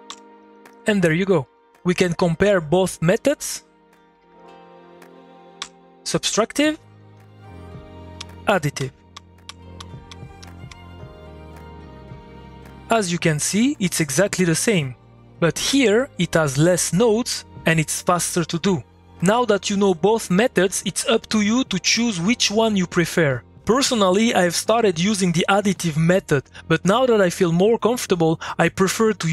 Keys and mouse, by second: 0.9 2, 3.8 click, 5.6 3, 6.4 middle click, 7.1 click, 8.2-11.1 typing, 11.5-29.3 middle drag.